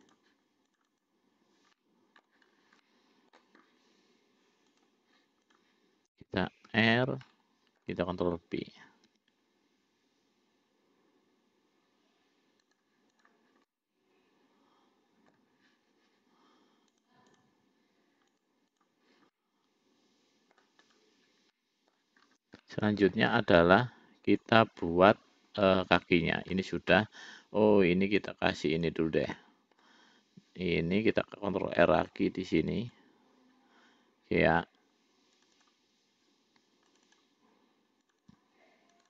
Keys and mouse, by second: 0.4 click, 1.0 click, 1.3 click, 2.0 middle click, 3.1 middle click, 5.1 click, 7.0 l, 7.5 middle click, 9.4 ctrl+b, 13.9-15.6 middle drag, 17.2 click, 18.6 click, 19.6-20.9 middle drag, 21.1 click, 21.8 middle click, 23.0 middle click, 26.0 middle click, 28.5 click, 29.5 middle click, 32.2 ctrl+r, 35.6 click, 35.9 click, 37.2 shift+click, 37.5 shift+click, 38.3 shift+click, 38.6 shift+click.